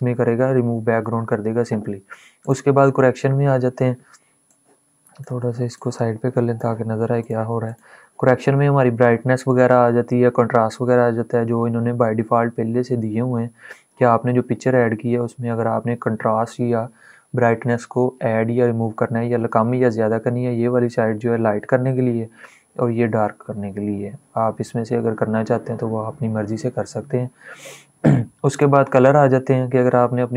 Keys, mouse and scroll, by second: 2.1-6.9 drag, 5.7 click, 11.7-12.4 scroll down 2, 12.4-13.3 scroll down 1, 28.3 click.